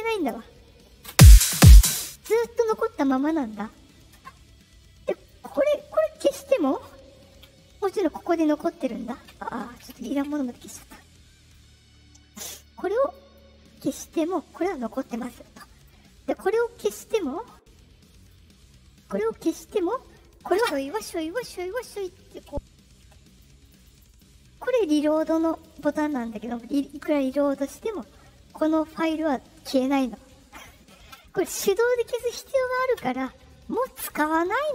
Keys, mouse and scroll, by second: 1.0 space, 5.0 click, 8.2 click, 10.6 right click, 11.4 click, 12.9 click, 13.8 right click, 14.8 click, 15.7 right click, 18.1 click, 20.3 click, 23.2 click, 23.5 click, 23.7 click, 23.8 click, 24.0 click, 25.0 click, 25.2 click, 25.3 click, 25.5 click, 25.6 click, 25.7 click, 25.9 click, 26.9 click, 27.0 click, 27.2 click, 31.0 right click, 32.9 click.